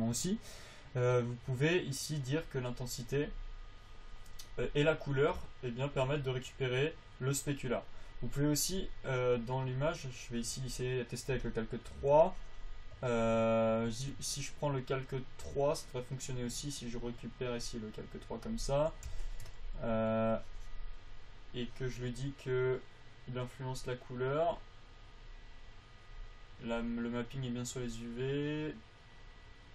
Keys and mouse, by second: 15.4 click, 19.4 f, 20.3 f, 23.2-28.1 drag.